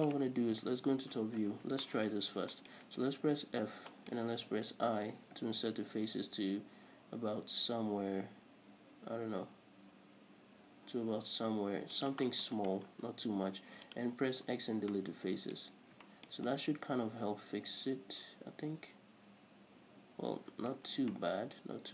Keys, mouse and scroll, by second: 0.9 KP_7, 1.6-1.9 scroll up 2, 2.5 scroll up 1, 2.9 shift+middle click, 3.1-3.7 scroll up 1, 3.7 f, 3.9 scroll up 1, 4.2 shift+middle click, 5.1 i, 6.2 typing, 12.4-12.8 middle drag, 12.4 shift+click, 12.6 scroll down 1, 13.2-13.6 scroll down 1, 13.6 x, 14.7 scroll down 1, 14.8 Tab, 15.2-21.9 middle drag, 16.0-16.4 scroll up 2, 21.2 scroll down 2.